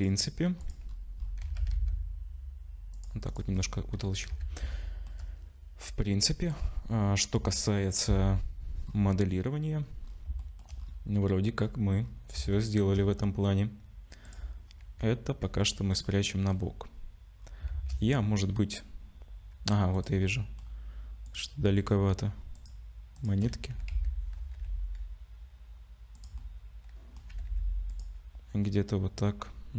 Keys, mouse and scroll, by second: 0.9 click, 0.9-1.6 scroll up 6, 1.4 s, 3.3 click, 3.5-4.3 scroll down 8, 4.3 ctrl+s, 4.7 shift+middle click, 7.0 scroll up 4, 7.5 shift+middle click, 8.1-8.8 scroll up 2, 8.8 scroll down 1, 8.9-10.0 scroll down 4, 10.0-10.4 scroll up 3, 10.4 shift+middle click, 10.8-11.1 scroll up 3, 11.6-12.2 scroll down 6, 12.5 shift+middle click, 13.2-13.9 scroll down 3, 14.2 click, 15.4 g, 16.2 middle click, 16.6 scroll down 1, 17.3-17.7 scroll down 6, 17.7 shift+a, 19.9 click, 20.2 middle click, 21.2 click, 21.7 shift+click, 22.5 click, 23.3 shift+click, 23.7 g, 26.4 middle click, 27.3 g, 28.6 middle click.